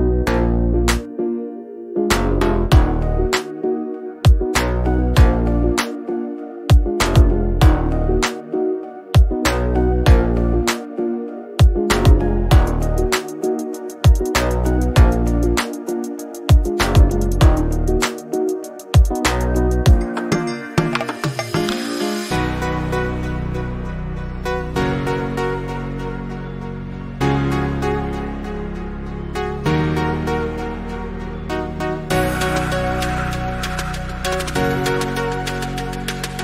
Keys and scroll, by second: 2.4 0, 8.7 Left.